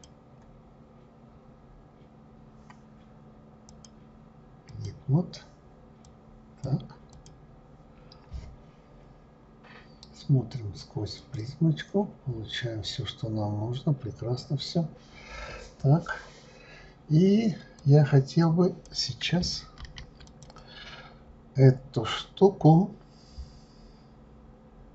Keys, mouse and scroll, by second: 3.7-6.1 drag, 7.1 click, 11.2 click, 12.5-12.9 scroll up 2, 14.4-17.1 scroll down 3, 17.8 click, 19.8 ctrl+z, 20.2 click, 21.0-22.1 scroll down 2, 23.1-24.1 scroll down 1.